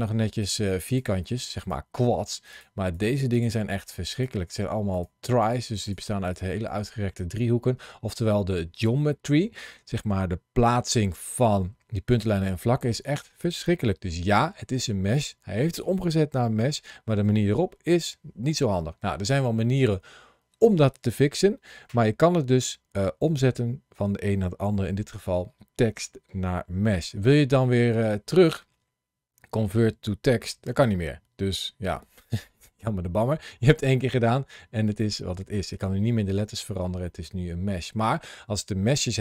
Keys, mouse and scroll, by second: 7.2 scroll down 2, 10.9 1, 26.9 Tab, 28.1 right click, 35.5 Tab, 36.3 Tab, 36.9 middle click.